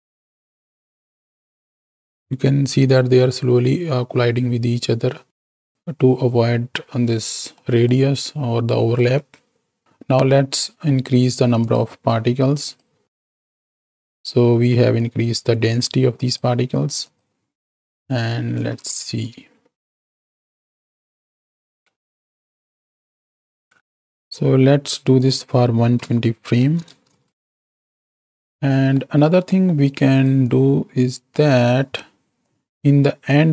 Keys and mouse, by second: 7.6 click, 8.8 click, 9.2 space, 9.8 click, 10.8 click, 11.5 click, 12.6 click, 13.2 KP_0, 15.0-16.4 drag, 17.0 click, 17.6 middle click, 18.5 shift+Right, 18.9 shift+Left, 19.4 space, 20.3-20.7 drag, 21.9 middle click, 22.2-23.9 middle drag, 24.1 KP_7, 25.6-27.1 drag, 27.3 middle click, 28.7 middle click, 29.4 middle click, 29.8-31.5 drag, 32.5-33.5 drag.